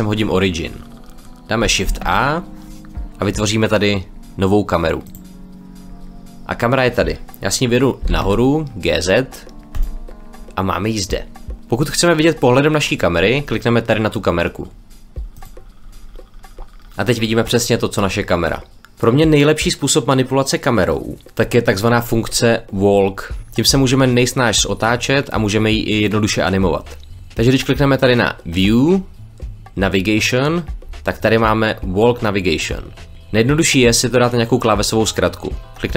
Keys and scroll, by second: 1.8 shift+a, 7.9 g, 8.2 z.